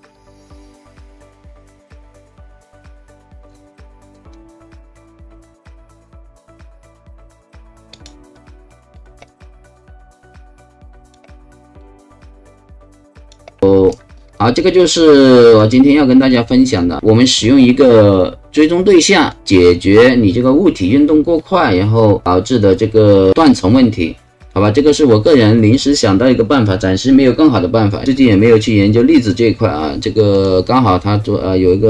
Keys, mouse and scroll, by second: 0.1 click, 7.9 click, 8.9 click, 9.4 right click, 10.0-11.1 alt+drag, 11.3 alt+right click, 12.1-13.3 alt+drag, 14.2 alt+right click, 14.6-15.6 alt+drag, 16.2 alt+right click, 16.8 alt+click, 18.5 alt+click, 19.3 alt+click, 30.3 click.